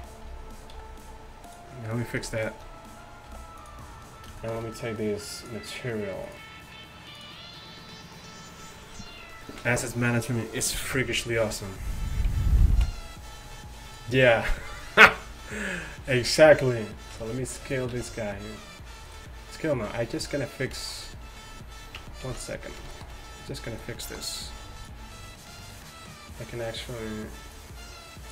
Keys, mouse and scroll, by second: 0.0 KP_1, 0.8 g, 3.4 g, 13.9-16.8 right drag, 17.2 s, 18.0 s, 20.3-20.9 right drag, 20.9 drag, 21.0-22.0 right drag, 22.0 Tab, 22.3 z, 24.7 b, 27.6 click.